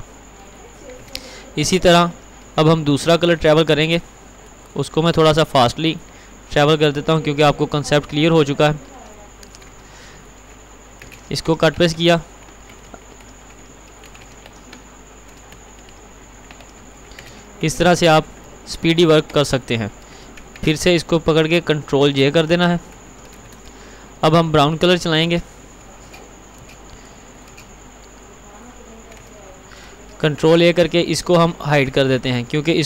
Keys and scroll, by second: 3.4 alt+c, 11.2 ctrl+®, 12.1 ctrl+t, 14.3 ctrl+®, 14.7 ctrl+t, 17.4 ctrl+r, 18.2 ctrl+t, 20.7 ctrl+a, 22.6 ctrl+j, 25.3 alt+c, 30.5 ctrl+a.